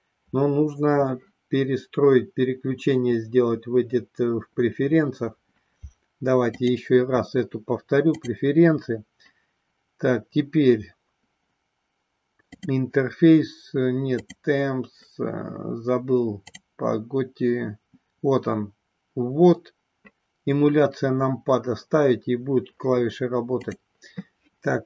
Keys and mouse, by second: 6.5-8.8 drag.